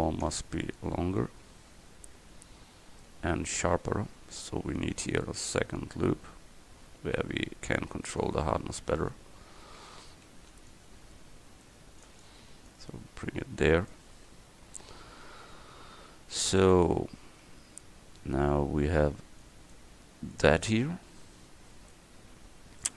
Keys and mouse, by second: 4.8 ctrl+r, 8.3 click, 10.0 a, 10.4 c, 16.0 click, 16.7 Tab.